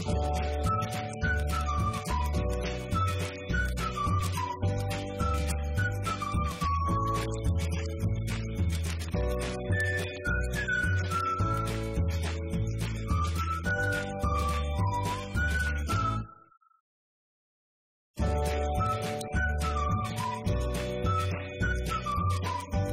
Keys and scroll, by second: 1.6 ctrl+Down, 2.5 ctrl+s, 5.1 ctrl+c, 5.2 ctrl+v, 6.8 F2, 7.5-11.3 typing, 18.7 Down, 19.1 a, 20.0 Return, 20.2 Up, 20.3 Right, 20.9 Left, 22.2-22.9 typing.